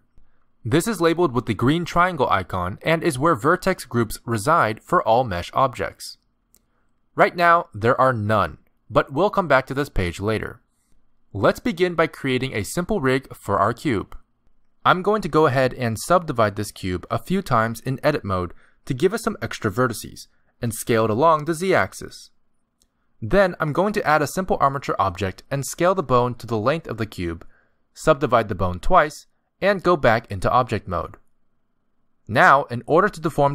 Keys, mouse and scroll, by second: 6.4 click, 7.9 click, 8.3 click, 16.1 click, 17.3 right click, 18.1 right click, 19.8 s, 23.1 Tab, 24.6 click, 26.6 z, 26.8 middle click, 26.9 scroll up 2, 26.9 Tab, 27.1 click, 27.1 g, 27.5 click, 27.6 g, 27.9 click, 28.1 click, 28.3 right click, 28.7 click, 28.9 click, 29.1 click, 29.3 middle click, 32.7 click.